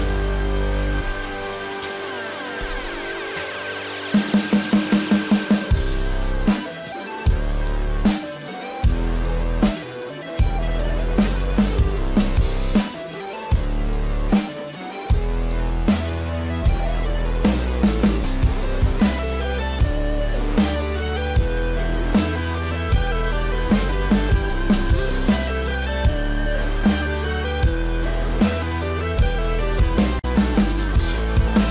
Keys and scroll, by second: 1.3 ctrl+e, 6.3 ctrl+j, 11.3 ctrl+e, 27.1 ctrl+e.